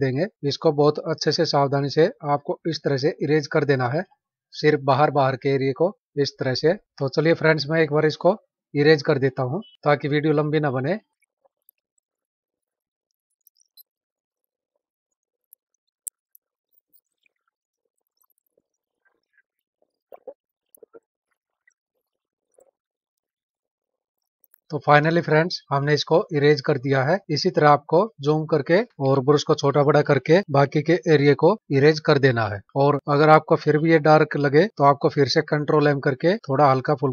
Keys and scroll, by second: 3.9 space, 11.2-14.4 typing, 15.4 space, 15.9 space, 22.5 space, 23.2 space, 23.6 space, 24.0 space, 25.0 ctrl+-, 26.9 ctrl+-, 32.6 ctrl+-, 35.4 ctrl+m.